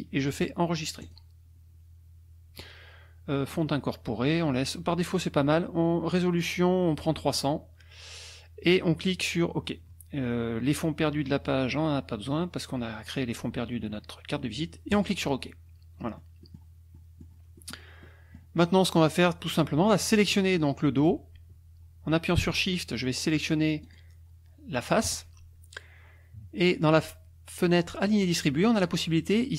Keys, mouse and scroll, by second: 1.0 click, 7.2 click, 14.9 click, 16.1 middle click, 16.9 click, 17.6 click, 18.0 click, 20.0 click, 23.8 shift+click.